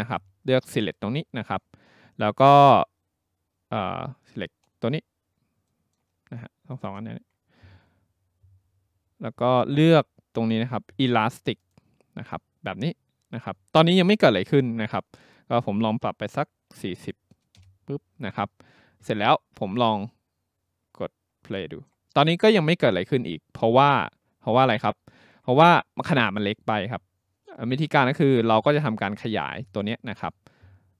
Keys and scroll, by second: 16.5-17.5 typing, 17.6 Return.